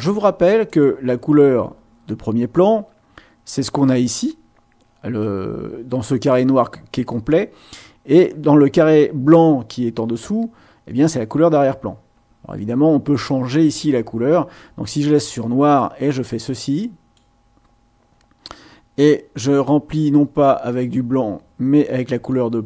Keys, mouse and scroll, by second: 0.7 click, 15.7-17.3 drag, 19.4-22.6 drag.